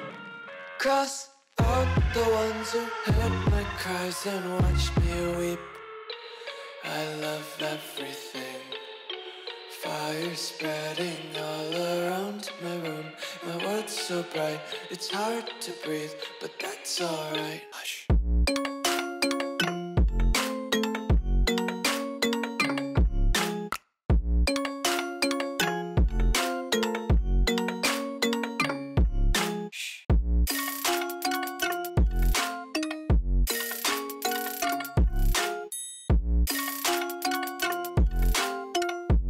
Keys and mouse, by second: 0.4 shift+middle click, 0.8 shift+a, 3.3 click, 4.7 click, 4.9-7.3 typing, 10.9 s, 11.3 s, 11.4 s, 15.8 shift+click, 16.7 click, 16.8 ctrl+a, 18.3 middle click, 18.7 Tab, 19.1 3, 19.3 click, 19.6 middle click, 20.3 shift+click, 20.8 middle click, 21.1 shift+middle click, 21.7 ctrl+b, 25.1 Tab, 25.2 click, 25.4 w, 26.1 KP_1, 27.9 shift+middle click, 28.9 shift+d, 29.9 s, 30.9 z, 31.6 g, 32.8 Tab, 33.0 1, 33.5 click, 34.2 g, 35.1 z, 35.2 z, 35.4 Tab, 36.0 s, 37.4 middle drag, 37.6 click, 37.9 Tab, 38.2 3, 38.7 shift+middle click.